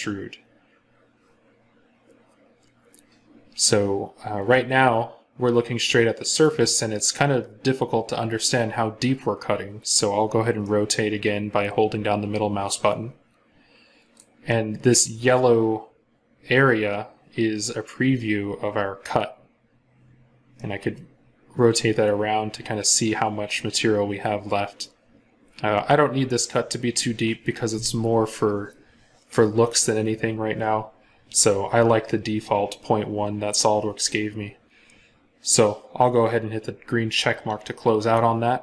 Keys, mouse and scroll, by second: 10.5 middle click, 20.4 middle click.